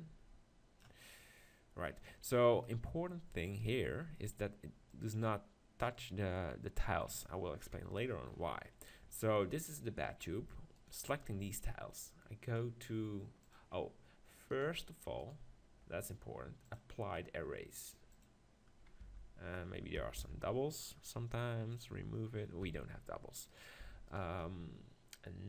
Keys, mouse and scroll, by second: 1.2-5.8 middle drag, 4.9-7.7 drag, 6.1 middle click, 7.7 KP_7, 10.8-13.1 drag, 14.5-18.2 drag, 14.5-19.8 right drag, 19.0 Tab, 20.2 ctrl+l, 22.6 Tab.